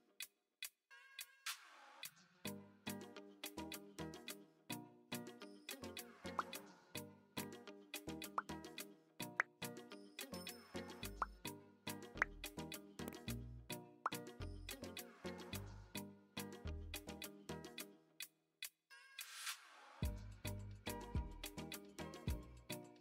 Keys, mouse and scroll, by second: 0.4 n, 1.5 click, 7.2-9.4 drag, 11.9-14.5 drag, 15.5-15.8 shift+middle drag, 16.2-16.7 middle drag, 17.4 shift+middle click, 18.1 shift+middle click, 18.9-20.0 middle drag, 21.3-21.7 shift+middle drag.